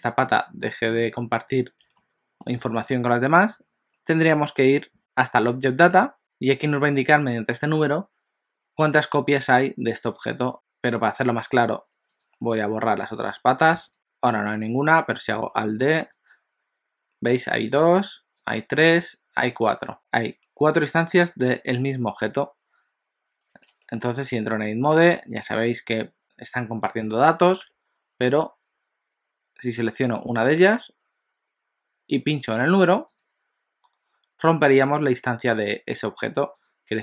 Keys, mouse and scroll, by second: 2.1 shift+middle click, 5.0 click, 6.2 click, 10.5 shift+click, 12.3 shift+click, 13.3 shift+click, 13.7 x, 13.9 click, 15.4 alt+d, 17.9 alt+d, 18.9 alt+d, 23.8 Tab, 25.2 s, 27.6 Tab, 30.1 click, 33.3 click, 36.9 click.